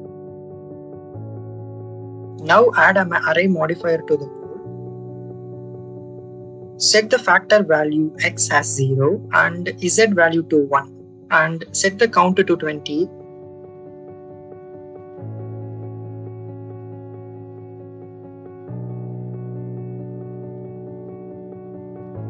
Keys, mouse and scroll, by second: 2.7-3.9 drag, 6.0-7.2 drag, 8.3 click, 9.2 0, 9.4-10.5 drag, 12.1 click, 12.5 click, 12.6 click, 13.1-14.3 drag, 15.6-17.3 drag, 20.9-22.0 drag.